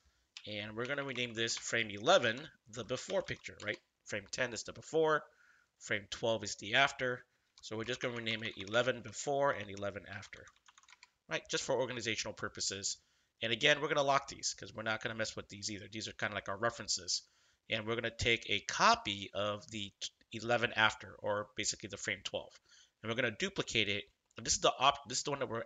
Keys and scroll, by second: 0.8-3.7 typing, 7.8-11.2 typing.